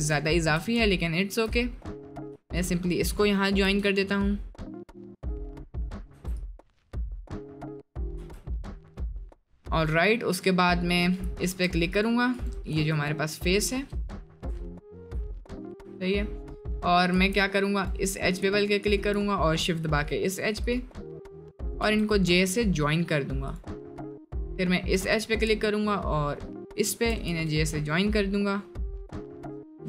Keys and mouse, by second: 0.3 shift+click, 1.0 shift+middle click, 3.7 j, 5.6 middle click, 6.2 Tab, 6.3 click, 6.8 middle click, 8.5 middle click, 10.3 click, 10.9 click, 11.5 2, 12.8 3, 13.1-14.5 drag, 14.7 shift+middle click, 16.7 click, 17.2 1, 18.8 shift+click, 20.7 click, 20.9 middle click, 21.8 j, 23.4 click, 26.7 shift+click, 27.4 j.